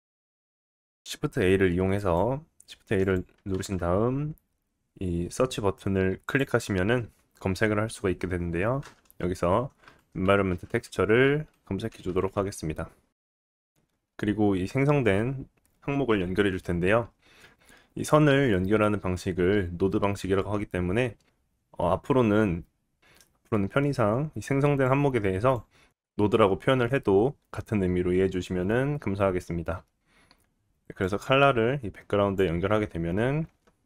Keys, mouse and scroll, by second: 0.4-3.0 middle drag, 1.0 shift+a, 3.5 shift+a, 30.0-33.8 drag.